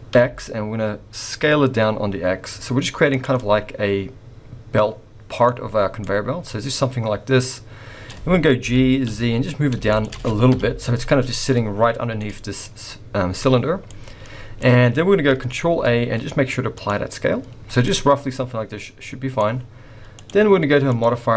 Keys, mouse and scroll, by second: 3.4 middle click, 5.5-6.0 scroll up 3, 6.0 middle click, 8.0-8.5 scroll up 1, 8.7 g, 10.5 KP_1, 11.0-11.7 scroll up 3, 12.1 scroll down 1, 12.2 middle click, 12.7-13.2 scroll down 3, 13.5-13.9 scroll down 4, 13.9 middle click, 14.7-15.3 scroll up 1, 15.3 scroll up 2, 15.6 ctrl+a, 17.8 middle click, 20.1 click, 21.0 click.